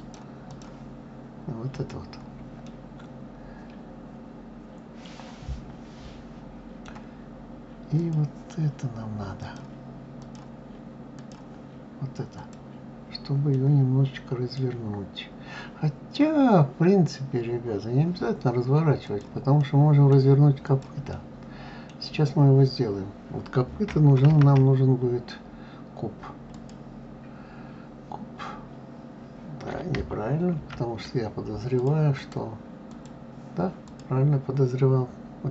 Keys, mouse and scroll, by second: 2.4-5.5 middle drag, 7.8 click, 9.2-11.1 drag, 12.1 click, 13.3-16.3 middle drag, 18.8 click, 19.4-20.4 middle drag, 20.4 click, 20.9-21.9 middle drag, 21.9-22.7 scroll down 2, 22.7-23.3 scroll down 2, 23.3-24.1 scroll down 1, 24.1 shift+a, 30.4 ctrl+z, 31.5 click, 31.9-33.7 drag.